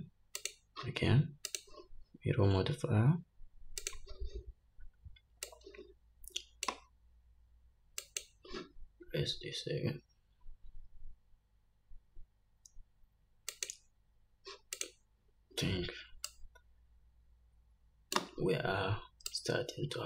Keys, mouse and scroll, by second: 0.7 click, 1.8-7.0 drag, 8.3 click, 15.0 click, 16.6-20.0 drag, 18.7-19.1 scroll down 2.